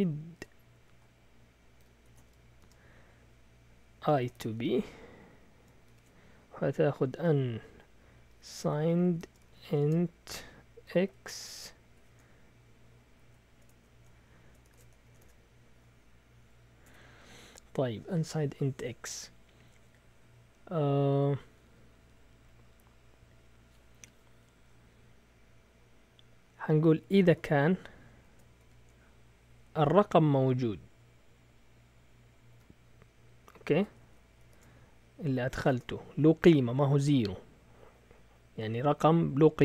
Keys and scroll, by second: 0.0-11.8 typing, 12.9-15.4 typing, 15.0 Return, 15.2 Return, 16.4 Up, 16.8 Tab, 27.1-28.6 typing, 32.5 typing, 34.0 shift+Tab, 34.4 shift+[, 35.5 Return, 35.7 Return, 36.7 Up, 36.9 Tab.